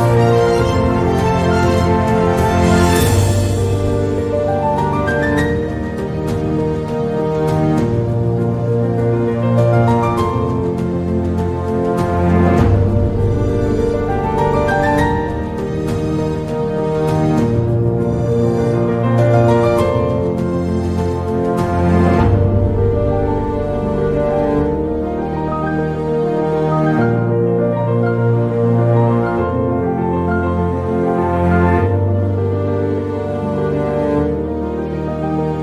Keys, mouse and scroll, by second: 1.3 Tab, 1.5 shift+a, 9.9 s, 12.2 Tab, 13.7 click, 15.1 g, 19.3-21.2 drag, 21.9 click, 22.6 click, 24.1 click, 25.7 g, 28.9 shift+a, 30.0 Tab, 31.1 shift+a, 32.9 s.